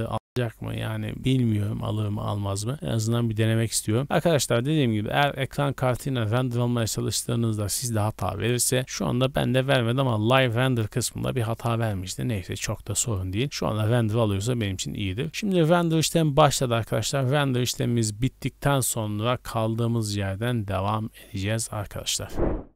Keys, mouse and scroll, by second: 15.3 scroll up 1, 15.6 middle click, 15.9-16.4 scroll up 3, 16.7 middle click, 17.2 scroll down 2, 18.3-18.7 scroll down 1, 19.3-19.7 scroll down 2, 19.7 middle click, 20.1 scroll down 2.